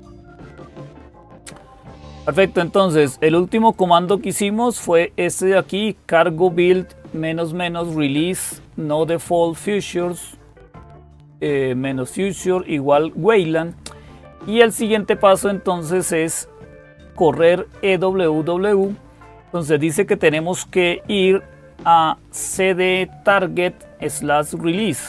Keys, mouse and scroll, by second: 0.3-1.3 scroll down 1, 1.3-1.7 scroll down 1, 3.6-7.1 drag, 13.4 click, 15.8-17.7 drag, 18.5-19.5 drag, 20.8-21.5 scroll down 2.